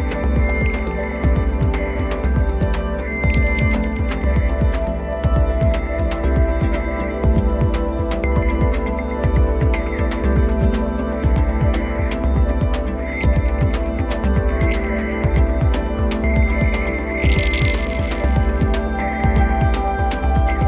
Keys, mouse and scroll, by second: 2.1 3, 3.6 drag, 4.1 shift+click, 5.6 drag, 6.2 shift+click, 7.0 x, 8.6 2, 9.3 click, 10.2 shift+click, 11.4 s, 16.9 3, 17.5 click, 18.2 shift+click, 18.6-20.0 scroll down 1, 20.2-20.6 drag.